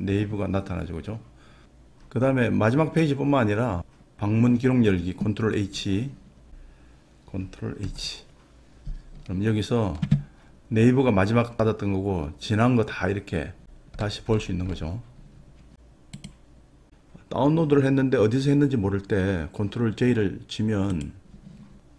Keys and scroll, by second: 7.8 ctrl+h.